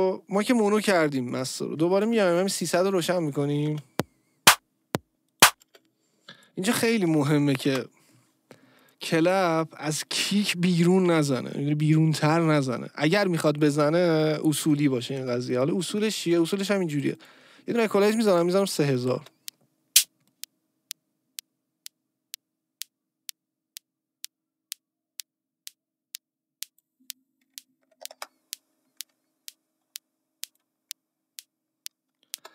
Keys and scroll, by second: 3.7 space, 5.6 space, 7.7 Return, 19.1 space, 28.1 Return, 32.3 space.